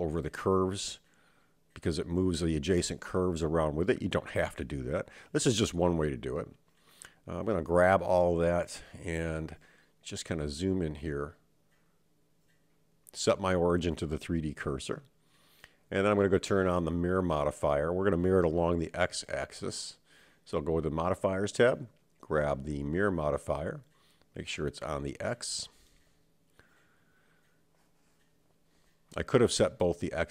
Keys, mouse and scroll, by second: 0.0 click, 0.3 g, 1.9 Tab, 3.4 super+z, 4.1 super+z, 4.4 super+z, 4.6 super+z, 4.8 super+z, 5.0 super+z, 5.1 super+z, 5.3 super+z, 5.6 super+z, 6.9-7.9 drag, 7.9 Tab, 9.3-9.9 scroll up 5, 10.7-14.0 right drag, 14.9-15.6 scroll down 2, 15.6-16.3 scroll up 1, 16.3-18.2 scroll up 2, 20.2 click, 21.2-23.4 drag, 26.3 Tab, 27.7-28.9 scroll down 3, 28.9 click.